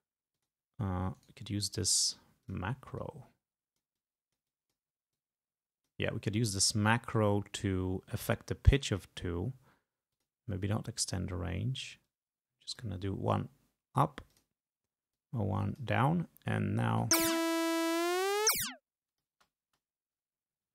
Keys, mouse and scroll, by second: 0.4 click, 1.2 right click, 2.5 click, 3.0-4.9 drag, 5.2 click, 8.9 right click, 10.2 click, 12.1-13.1 drag, 14.4 click, 15.2-16.3 drag, 16.9 space, 17.9-19.5 drag, 19.4 space.